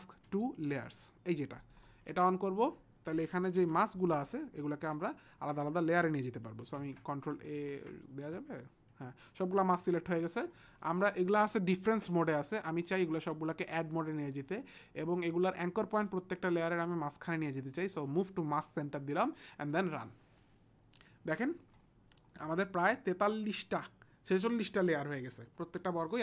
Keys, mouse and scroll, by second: 0.3 m, 0.7 m, 1.8 click, 4.9 click, 6.8 ctrl+a, 7.5 click, 13.0 click, 13.7 click, 17.9 click, 19.6 click.